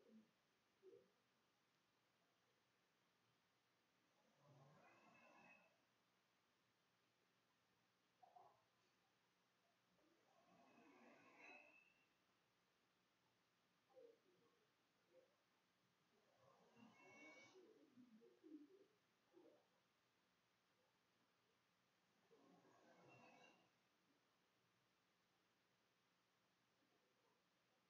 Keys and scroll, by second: 1.6-11.0 typing, 10.4 shift+Up, 13.2-18.6 typing, 19.8 c, 20.9-27.8 typing.